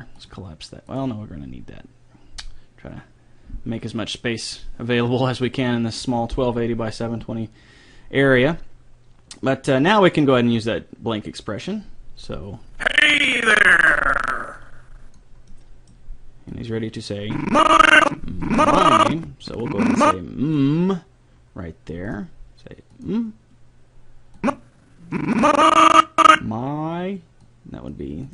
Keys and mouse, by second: 0.2-2.7 drag, 10.6-14.1 drag, 15.5-16.5 middle drag, 16.5-18.4 drag, 22.1-26.2 drag, 27.4 click.